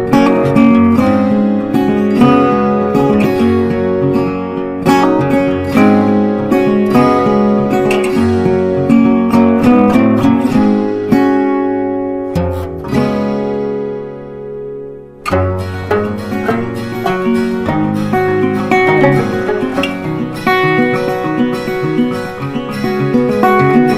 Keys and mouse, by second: 8.5 right click, 9.5-17.5 drag, 17.5 click, 22.5 shift+5.